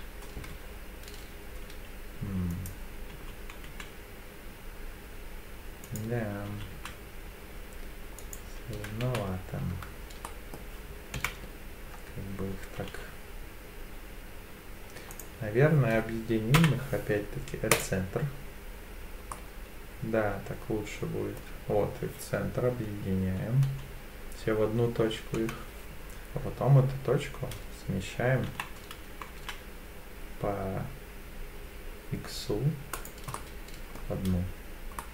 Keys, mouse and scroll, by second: 2.5 click, 3.1 s, 3.7 x, 5.9 right click, 6.5 s, 8.2 right click, 9.1 ctrl+z, 10.2 middle click, 11.2 KP_7, 12.3 s, 15.1 click, 16.6 m, 19.3-21.4 middle drag, 25.4 KP_7, 28.5 g, 29.4 x, 33.0 click, 33.3 middle click, 34.2 Tab, 35.0-35.1 middle drag.